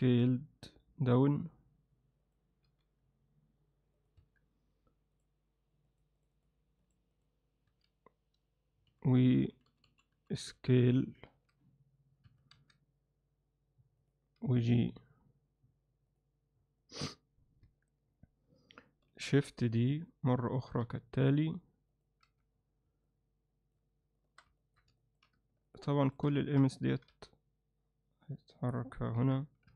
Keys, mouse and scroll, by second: 0.1 s, 2.7 g, 4.2 Tab, 7.2 click, 7.7 s, 12.6 s, 14.4 g, 17.7 Tab, 19.1 shift+d, 20.7 r, 22.3 z, 23.1-23.8 alt+middle drag, 24.2 shift+middle drag, 24.6 middle click, 24.7 click, 25.0 alt+shift+middle click, 25.7 shift+click, 26.5 ctrl+middle click, 29.2 KP_1.